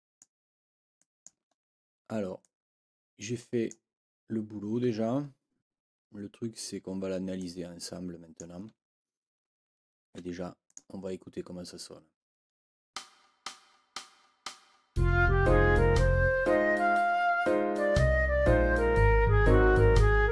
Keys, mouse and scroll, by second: 0.9 click, 1.5 ctrl+scroll up 2, 2.4-3.9 ctrl+drag, 7.3-8.5 drag, 10.7 click, 12.9 space.